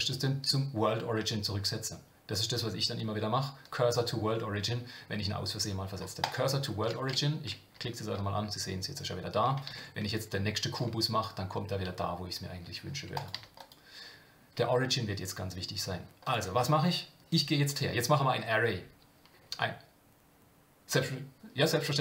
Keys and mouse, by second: 9.7 shift+a, 16.2 click.